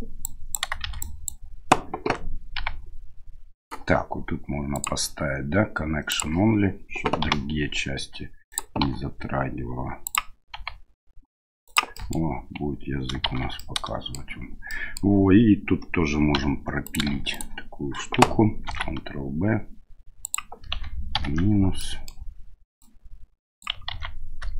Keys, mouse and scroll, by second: 0.2 click, 0.8 shift+z, 1.0 click, 2.5 g, 4.8-6.4 drag, 7.2 g, 8.8 r, 10.5 g, 11.9 middle click, 13.2 shift+z, 13.6 middle click, 14.7 click, 16.3 2, 16.8 right click, 17.3 right click, 18.6 ctrl+b, 21.8 middle click, 22.8 click, 23.9 ctrl+z.